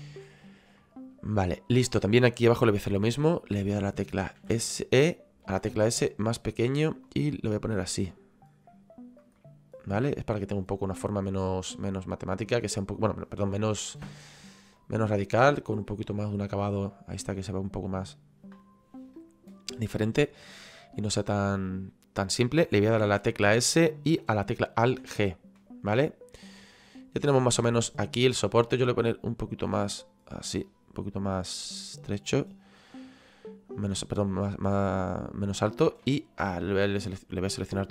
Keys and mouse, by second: 0.8 middle click, 1.7 right click, 6.7 click, 9.4 middle click, 10.7 click, 12.0 middle click, 14.2 click, 20.3 middle click, 21.1 shift+middle click, 23.7 click, 25.6 middle click, 27.3 middle click, 28.9 click, 31.1 click, 36.1 shift+right click, 37.2 click.